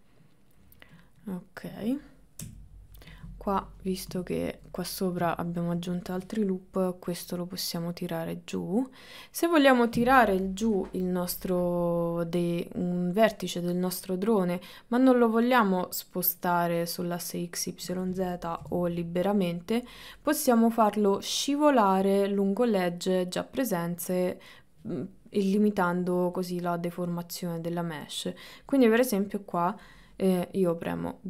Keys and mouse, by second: 1.0 click, 1.4 middle click, 2.5 KP_3, 4.4 middle click, 5.4 middle click, 11.6-12.9 middle drag, 13.5-15.1 middle drag, 16.5-18.0 middle drag, 18.7 g, 20.4 middle click, 23.1-25.6 middle drag, 26.5-28.3 middle drag, 28.8 middle click.